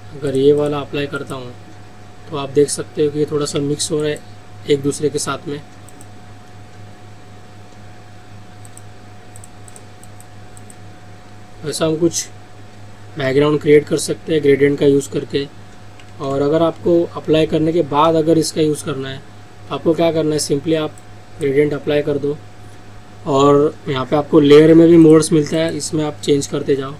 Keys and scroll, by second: 3.7 ctrl+z, 16.7 ctrl+alt+z.